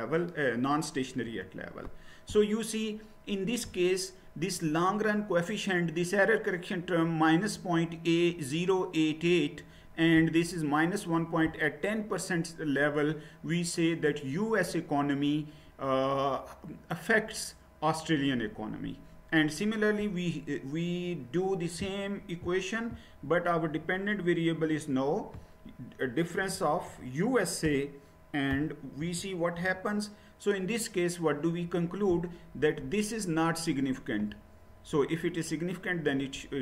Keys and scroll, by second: 1.3 Return, 26.4 BackSpace, 26.8 BackSpace, 27.6 u, 28.5 Right, 29.0 a, 29.6 Return.